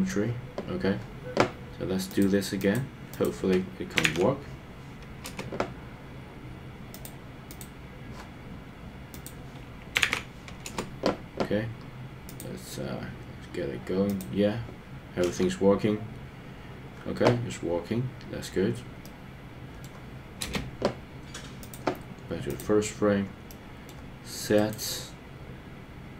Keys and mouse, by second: 2.2 click, 3.1-5.3 drag, 7.5 click, 9.3-10.7 drag, 15.2 KP_0, 19.0 middle click, 20.4 space, 23.5 middle click, 24.6-26.1 right drag.